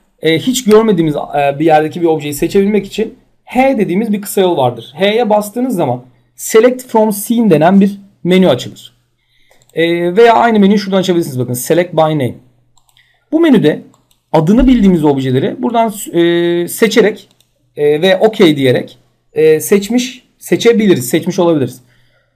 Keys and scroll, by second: 3.1 h.